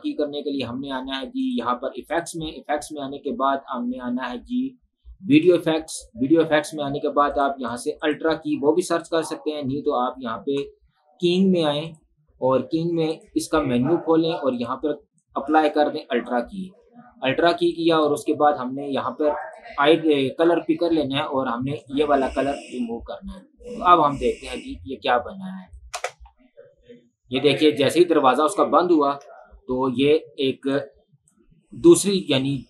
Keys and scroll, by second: 26.2 space, 29.3 space.